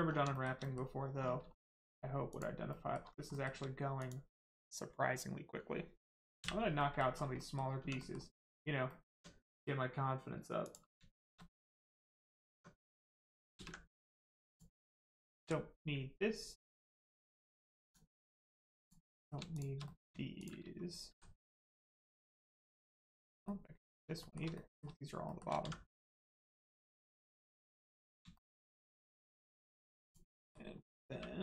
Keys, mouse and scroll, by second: 0.0 scroll down 1, 0.3 shift+middle click, 0.5 middle click, 0.6 middle click, 1.1 scroll up 1, 1.5 shift+middle click, 2.3 click, 2.7 middle click, 3.3 shift+middle click, 3.9 middle click, 6.7 middle click, 7.1 scroll down 1, 7.3 middle click, 7.7 Tab, 7.9 middle click, 9.1 Tab, 9.5 middle click, 10.6 click, 11.1 shift+middle click, 11.3 middle click, 11.4 middle click, 12.5 Tab, 13.5 ctrl+space, 13.9 middle click, 14.2 Tab, 14.4 click, 17.8 click, 18.1 middle click, 18.7 click, 19.1 middle click, 19.5 shift+click, 19.8 middle click, 20.3 shift+click, 21.0 x, 23.1 shift+click, 23.4 middle click, 24.1 shift+middle click, 24.5 middle click, 24.5 middle click, 25.2 shift+middle click, 25.5 middle click, 27.3 click, 27.7 middle click, 28.3 shift+middle click, 28.5 middle click, 28.6 middle click, 29.9 click, 30.3 middle click, 30.7 scroll up 1, 31.1 1.